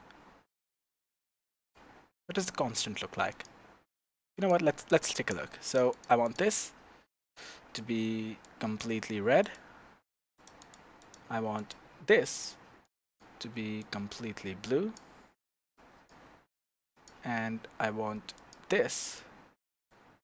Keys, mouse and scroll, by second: 3.3 click, 4.3 click, 5.7 click, 6.2 click, 9.4 click, 10.3 click, 10.6 click, 11.0 click, 11.5 click, 17.0 click, 18.3 click, 19.0 click.